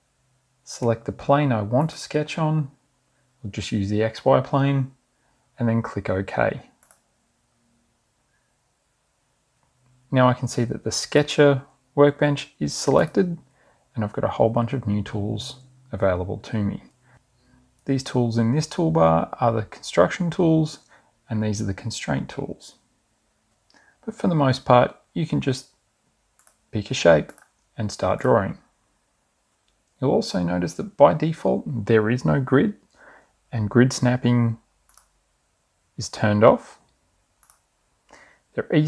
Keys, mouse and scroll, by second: 2.3 click, 7.3 click, 11.6 click, 13.5 click, 26.5 click, 27.4 click, 28.2 click, 35.0 click, 37.5 click.